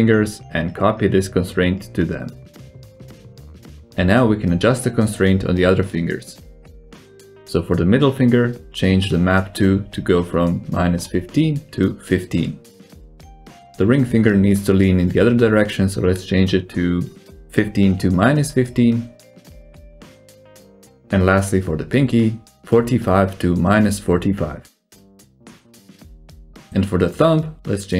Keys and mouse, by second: 0.2 shift+click, 0.6 shift+click, 1.2 ctrl+c, 5.8-8.7 drag, 10.5-13.1 drag, 14.1 click, 15.9 click, 17.3-20.8 drag, 21.5 right click, 23.0 click, 24.2-27.1 drag, 27.8 click.